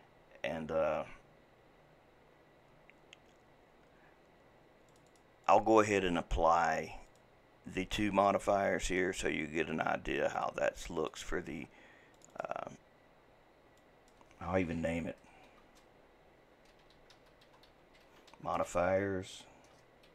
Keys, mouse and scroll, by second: 8.2-12.2 drag, 12.3-20.1 drag.